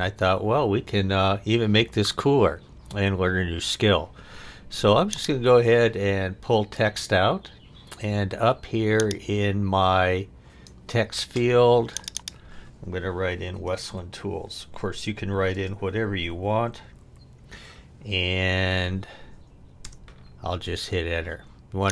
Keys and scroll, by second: 13.2-17.5 typing, 19.8 Return.